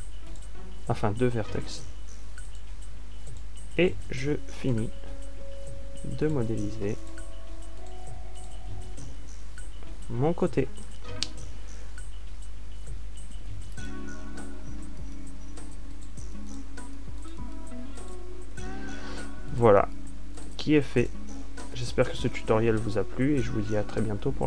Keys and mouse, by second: 0.0 e, 3.1 a, 7.0 f, 10.8 f, 12.5 a, 14.3 ctrl+r, 20.2 f.